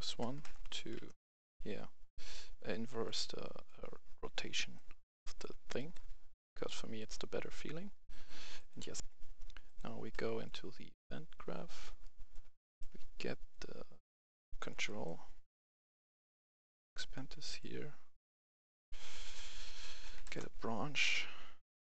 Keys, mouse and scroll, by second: 0.1 BackSpace, 0.8 1, 2.0 click, 4.4 right click, 6.8 click, 8.0 click, 8.9 F11, 9.6 click, 10.1-11.3 right drag, 11.5-12.0 scroll up 1, 12.0 right click, 13.5 click, 15.6 click, 16.1 right click, 16.8 click, 18.4 right click, 19.3 click, 20.0 i, 20.1 f, 20.2 Return, 21.7 click.